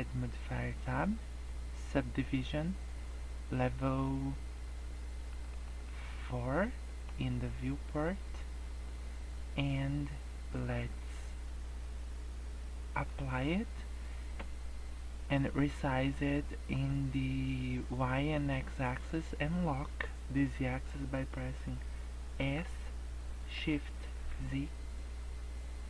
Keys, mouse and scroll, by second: 1.0 click, 2.7 scroll up 1, 5.2 click, 5.5 click, 5.8 click, 6.5 scroll down 2, 6.8 middle click, 7.1 scroll up 2, 12.9 click, 22.3 s.